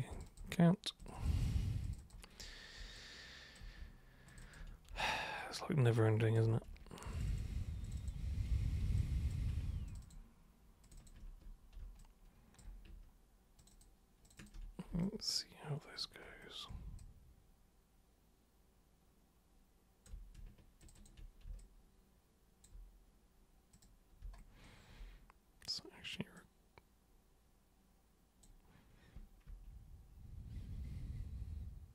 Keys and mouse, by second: 0.1 ctrl+shift+super+click, 0.9 ctrl+shift+super+click, 1.8 ctrl+shift+super+click, 2.1 ctrl+shift+super+click, 2.9 alt+super+click, 4.3 ctrl+shift+super+click, 5.0-6.3 alt+super+drag, 7.1 ctrl+shift+super+click, 7.3 ctrl+shift+super+click, 7.8 ctrl+shift+super+click, 8.0 ctrl+shift+super+click, 9.0 alt+super+click, 9.9 ctrl+shift+super+click, 10.0 ctrl+shift+super+click, 10.8 ctrl+shift+super+click, 12.0 alt+super+click, 13.6 ctrl+shift+super+click, 14.3 ctrl+shift+super+click, 14.4 ctrl+shift+super+click, 15.0-16.0 alt+super+drag, 17.0-20.0 alt+super+drag, 20.8 ctrl+super+click, 21.0 ctrl+super+click, 21.6-22.6 alt+super+drag, 23.8 super+click, 26.4-28.4 super+drag, 29.5 super+3.